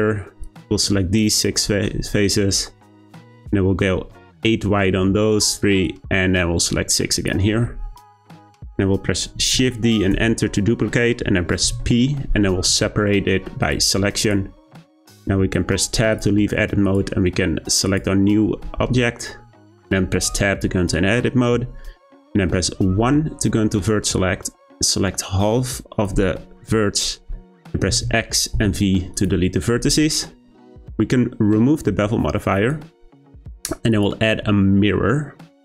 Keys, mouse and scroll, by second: 0.4 shift+click, 2.5 shift+click, 5.8 shift+click, 9.5 shift+d, 11.6 p, 14.2 click, 14.9 Tab, 16.1 click, 16.8 click, 17.8 click, 20.1 Tab, 22.9 1, 24.1 click, 27.9 x, 29.1 click, 32.5-33.9 drag.